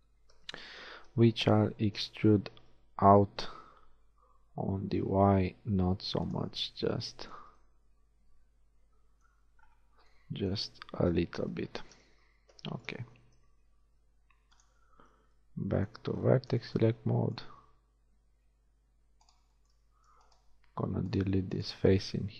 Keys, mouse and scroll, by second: 1.7 e, 3.3 s, 7.4 z, 11.1 KP_1, 12.1 z, 13.8 ctrl+Tab, 15.1 z, 22.1 shift+x.